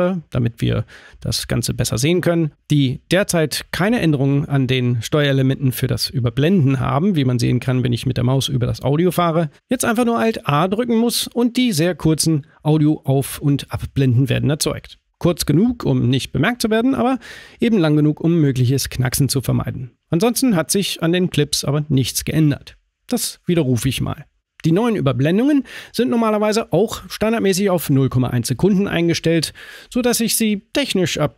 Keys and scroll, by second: 9.1 alt+a, 12.3 alt+a, 22.2 super+z.